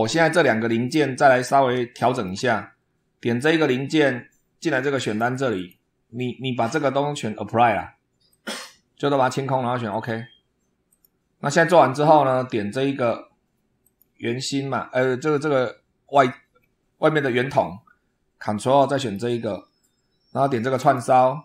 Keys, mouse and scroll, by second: 1.8 shift+middle click, 3.5 click, 4.9 click, 5.4 click, 8.1 click, 9.7 click, 10.7 click, 12.4 scroll up 1, 13.7 click, 16.4 scroll down 1, 17.4 scroll down 1, 18.9 ctrl+click, 20.6 click.